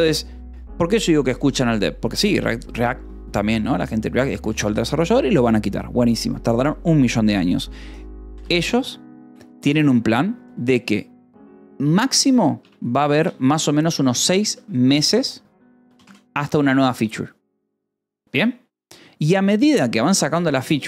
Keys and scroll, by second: 1.9 a, 2.5 space, 8.3 space, 12.0-14.5 typing, 14.8 Escape, 16.5 ctrl+s.